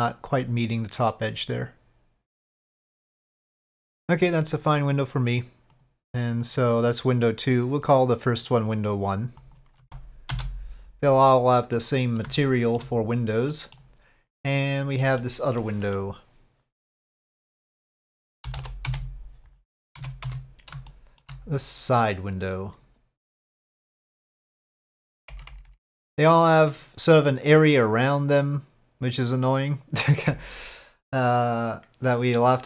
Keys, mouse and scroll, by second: 1.5 click, 2.8-3.9 middle drag, 5.8 click, 7.8 click, 8.4 click, 8.7 click, 8.9-10.9 drag, 11.7 middle click, 12.4 shift+middle click, 13.5 middle click, 14.5 click, 15.0 middle click, 15.6-15.9 middle drag, 17.7-19.6 drag, 19.7 KP_5, 19.7 KP_7, 19.8 middle click, 20.1 z, 20.9 shift+middle drag, 21.1 click, 22.0 click, 23.7 click, 24.1 click, 24.8-26.8 drag, 27.3-32.4 middle drag.